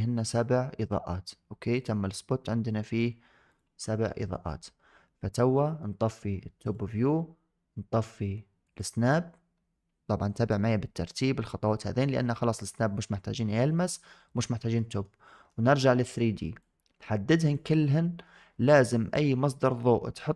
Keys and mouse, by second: 1.6 click, 3.3 click, 4.0 shift+middle drag, 6.5 click, 8.5 click, 12.6-13.5 middle drag, 14.6 shift+middle drag, 15.4 shift+middle drag, 15.7 middle click, 16.5-17.4 drag, 19.5 middle click.